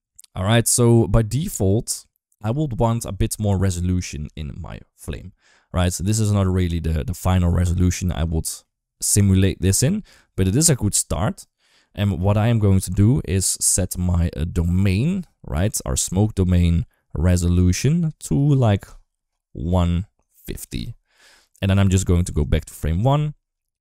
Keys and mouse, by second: 4.5 ctrl+s, 6.0 shift+middle click, 6.3 shift+middle click, 8.1 shift+middle click, 16.1 click, 18.1-20.9 drag, 22.2-23.8 drag.